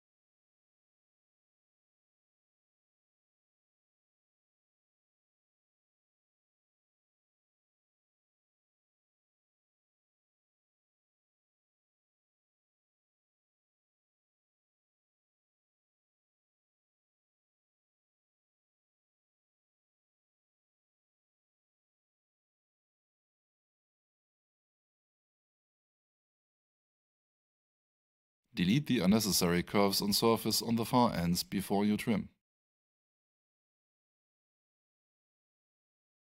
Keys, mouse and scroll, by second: 1.8 click, 4.7 space, 6.4 click, 10.2 click, 10.3 double click, 11.7 click, 13.7 click, 14.6 space, 20.9 click, 25.7 click, 26.3 alt+shift+right click, 27.9 click, 30.6 Return, 31.9 click, 33.1 alt+shift+right click, 34.3 alt+shift+middle click, 35.2 click, 36.2 space.